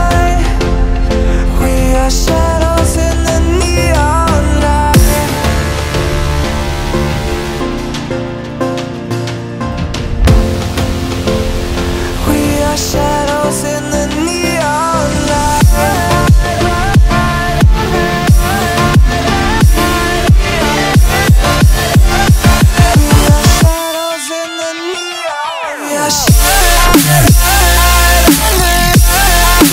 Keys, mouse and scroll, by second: 0.0-1.0 drag, 1.4 click, 1.9 e, 2.8 r, 3.9 e, 6.2 click, 6.9-7.9 shift+middle drag, 8.0 e, 9.5 e, 10.2 r, 12.0 e, 12.6 r, 13.5-14.6 drag, 14.7 shift+middle click, 15.4 click, 16.9 click, 17.1 shift+middle click, 17.4 r, 17.9 e, 18.8 shift+middle click, 19.1 e, 21.3 r, 22.9 e, 24.4 e, 25.2 r, 26.6 scroll up 3, 26.8 shift+middle click, 27.1 click, 27.9 click, 28.1 s, 28.8 click, 29.0 e.